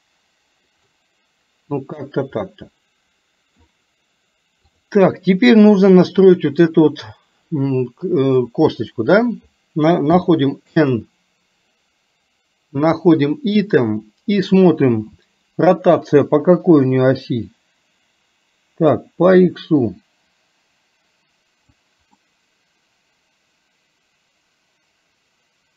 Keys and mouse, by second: 2.6-3.7 middle drag, 6.0 middle click, 10.3 n, 13.0 click, 19.2-21.7 drag, 22.2-25.7 middle drag.